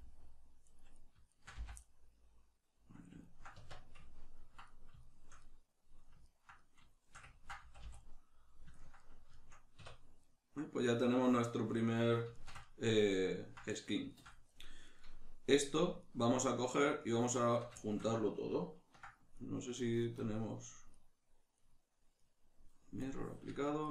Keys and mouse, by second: 0.0-1.0 middle drag, 1.0 right click, 1.3 shift+right click, 1.6 f, 1.8-14.9 middle drag, 3.6 Tab, 7.6 a, 9.8 \, 14.9 right click, 15.6 right click, 16.0 shift+right click, 17.0 shift+right click, 19.4 right click, 20.2-21.0 drag, 21.0 right click, 21.6 right click, 22.2 right click, 23.0 click, 23.8 shift+right click.